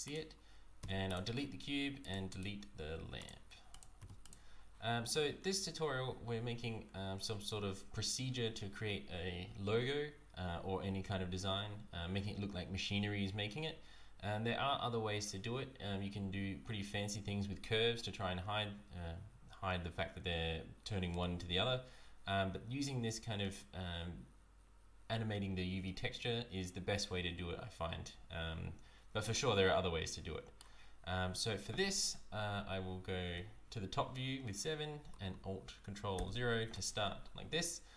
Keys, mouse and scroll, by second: 0.0 click, 0.8 x, 2.0 click, 2.3 right click, 3.2 click, 3.7 click, 4.0 x, 29.3 middle click, 33.3 KP_7, 36.1 ctrl+alt+KP_0.